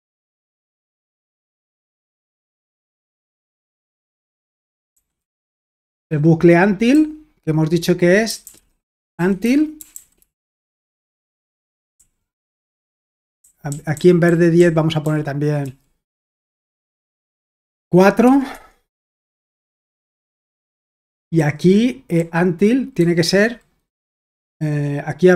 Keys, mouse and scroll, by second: 0.6-1.5 typing, 3.3-10.2 typing, 10.5 Escape, 12.0-18.2 typing, 18.5 Escape, 20.0-24.2 typing.